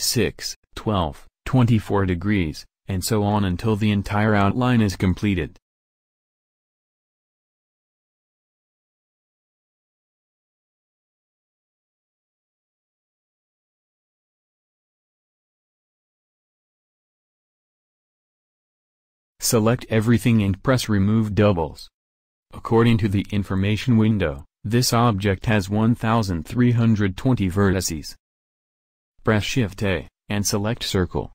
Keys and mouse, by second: 0.2 shift+d, 4.0 a, 4.2 a, 4.9 shift+d, 7.1 a, 7.4 a, 8.1 shift+d, 11.1 a, 11.3 a, 12.2 shift+d, 16.3 a, 16.6 a, 17.2 shift+d, 19.9 a, 20.1 a, 21.2-23.3 drag, 29.6 shift+a.